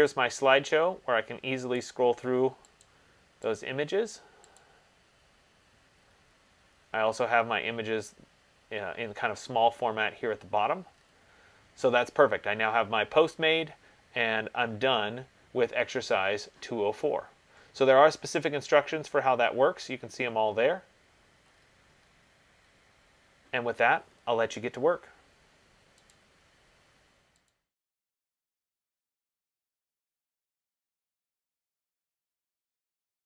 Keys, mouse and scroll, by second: 2.0 click, 3.0 click, 3.8 click, 4.7 click, 6.1-6.4 middle click, 6.2 middle click, 6.3 middle click, 6.8 middle click, 6.9 middle click, 11.2 middle click, 11.3-12.0 scroll, 16.3 click, 17.1-18.2 scroll, 18.7-21.2 scroll, 21.5-22.4 scroll, 22.8-24.4 scroll.